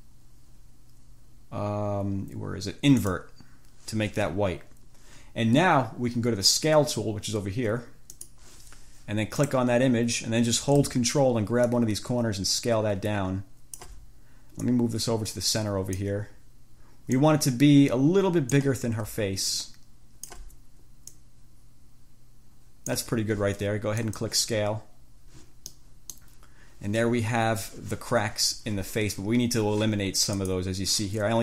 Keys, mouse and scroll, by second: 3.3 click, 8.3 click, 9.7 click, 11.9-14.2 ctrl+drag, 14.9-16.4 drag, 17.4-19.0 drag, 19.7-20.7 ctrl+drag, 21.3-23.3 drag, 24.3 click, 25.8 click, 30.6 click.